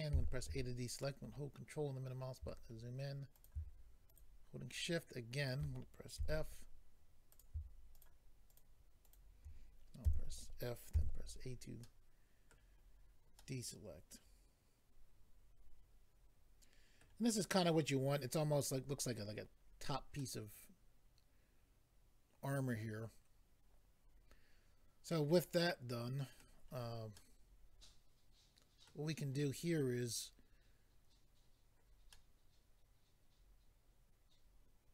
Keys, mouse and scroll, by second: 0.1 a, 1.0 ctrl+middle click, 3.3 click, 4.1 shift+click, 4.7 shift+click, 5.4 shift+click, 6.2 f, 7.3 click, 8.5 shift+click, 9.0 shift+click, 9.1 shift+double click, 10.0 f, 10.9 a, 11.3-11.8 scroll down 2, 11.8 middle click, 12.9-13.4 scroll down 2, 13.4 middle click, 17.3 scroll down 1, 19.7-20.2 scroll down 1, 20.2 middle click, 27.2 middle click, 32.1 middle click.